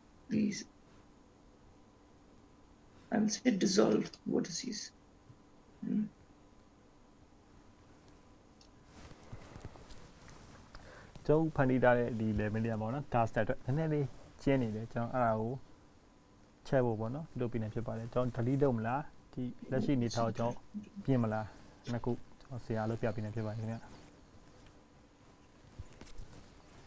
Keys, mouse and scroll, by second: 0.6 x, 5.7 ctrl+z, 7.1-8.4 scroll down 2, 8.4 click, 9.2-9.9 scroll up 3, 11.3 scroll up 1, 12.1-14.1 scroll down 2, 14.8 right click, 20.8 ctrl+z, 21.9-23.2 scroll up 3, 23.2 click, 23.8 click, 25.5 x.